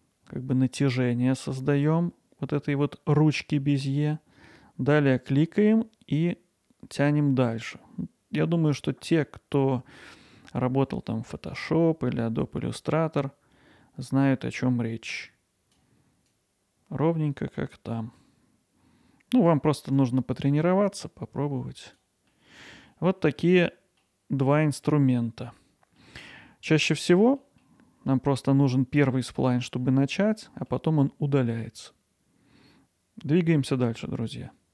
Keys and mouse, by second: 22.4 middle click, 22.9 middle click, 24.8 middle click, 26.2 middle click, 27.1 Tab, 27.5 middle drag, 30.5 middle click.